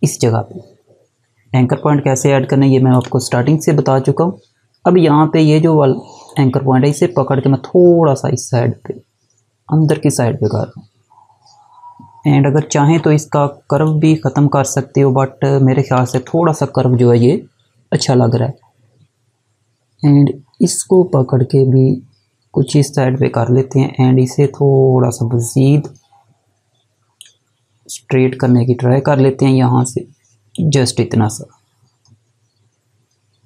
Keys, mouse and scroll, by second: 2.9 click, 6.3 click, 13.7 click, 20.9 click.